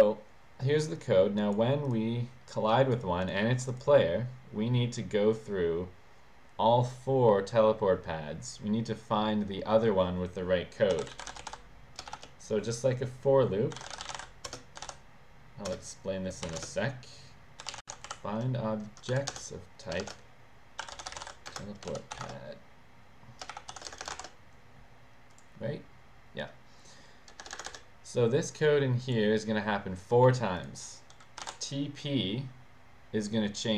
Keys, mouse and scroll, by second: 1.0 click, 1.9 click, 2.8 click, 3.3 click, 3.8 click, 10.8-12.2 typing, 13.6-14.8 typing, 16.5-18.6 typing, 19.1 Down, 19.3 Return, 20.0-24.2 typing, 25.3 click, 27.4 Return, 27.6 Return, 28.6 click, 30.6 click, 31.2-31.9 typing.